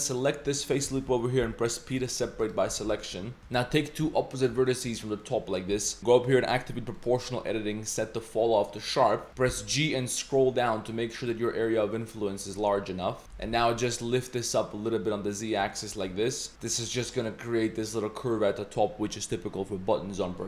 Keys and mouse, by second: 0.1 alt+click, 1.4 p, 2.2 Tab, 2.7 z, 2.9 Tab, 3.0 middle click, 3.8 click, 4.3 shift+click, 4.7-5.1 shift+middle drag, 5.2-5.6 middle drag, 5.7 z, 6.2-8.9 drag, 9.1 middle click, 9.3 g, 10.1 g, 13.2 middle click, 13.5 g, 15.6 click, 16.0 Tab, 16.1 click, 17.0 click.